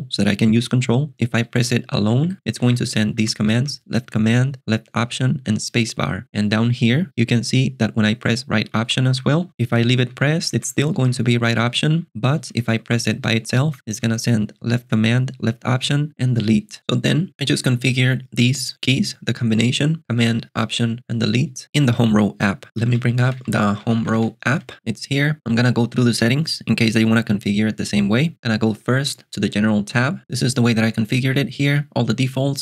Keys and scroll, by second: 1.4 j, 3.5 l, 6.2 k, 8.6 j, 10.1 j, 11.9 j, 12.5 j, 14.0 l, 22.8 ctrl+alt+shift+super+g, 22.9-24.7 typing, 28.8 alt+super+BackSpace, 29.9 l.